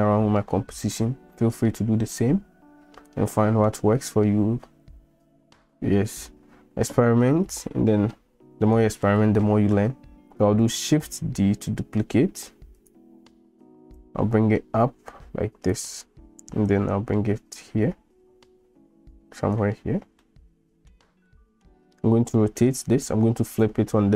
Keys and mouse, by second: 1.0-1.4 middle drag, 2.2-3.7 middle drag, 11.3 shift+d, 14.1-15.9 drag, 15.9 middle click, 16.7-17.6 drag, 19.6 click, 20.3-20.9 middle drag, 21.3 shift+middle click, 22.4-22.7 middle drag.